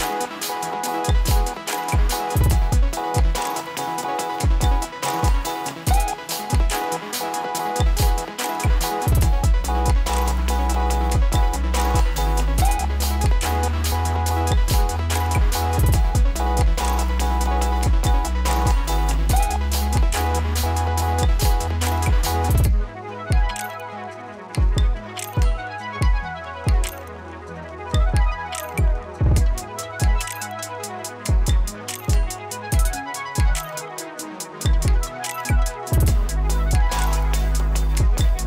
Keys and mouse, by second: 0.0-1.2 typing, 1.4 Return, 2.3 click, 3.3 ctrl+i, 4.7 click, 5.4 Return, 6.7-9.4 drag, 11.2 ctrl+a, 17.8 s, 18.4-22.8 drag, 23.9 space, 25.2 click, 26.0 ctrl+d, 26.8 space, 28.4 click, 29.9 F4, 30.6-34.0 drag, 34.0 space, 38.0 ctrl+z.